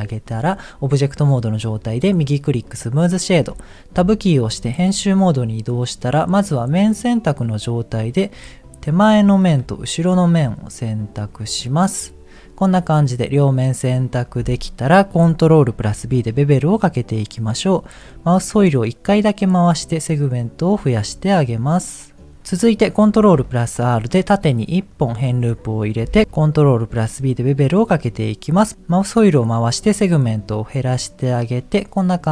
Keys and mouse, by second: 2.0 right click, 4.1 Tab, 4.7 middle click, 6.4 click, 8.5 middle click, 9.1 middle click, 9.9 click, 11.3 click, 11.7-13.1 middle drag, 15.7 ctrl+b, 23.1 ctrl+r, 26.9 ctrl+b.